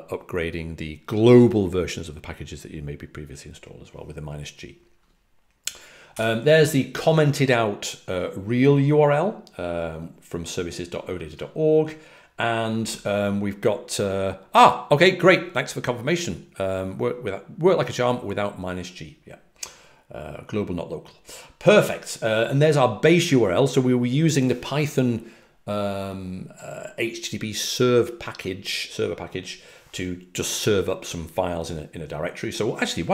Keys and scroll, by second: 6.0 typing.